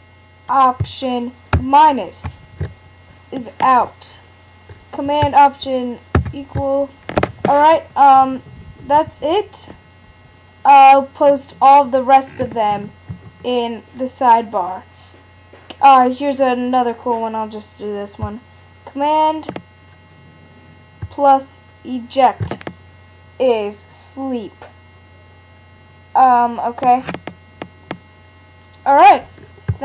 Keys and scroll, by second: 0.8 alt+super+-, 1.5 alt+super+=, 6.1 alt+super+=.